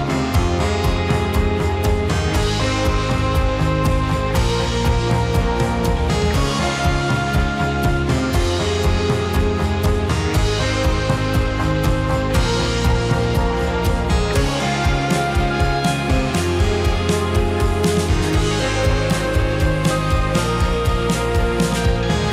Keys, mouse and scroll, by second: 0.9 space, 1.8 click, 2.7 click, 4.3 click, 5.8 click, 7.3-8.2 drag, 15.6-16.7 drag, 17.8 click.